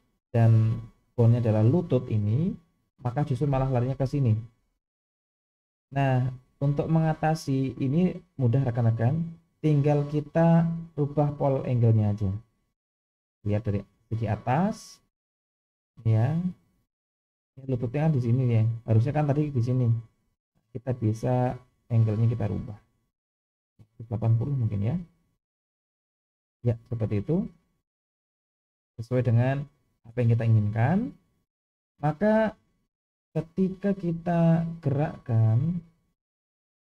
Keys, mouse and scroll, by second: 8.6-9.9 middle drag, 13.9 KP_7, 15.4-16.4 scroll up 2, 16.8 click, 21.5-22.9 drag, 23.7-26.1 drag, 28.1-29.2 middle drag, 29.9-30.3 scroll down 2, 32.8-33.4 middle drag, 34.1 click, 34.6-35.3 scroll down 1, 35.8 g.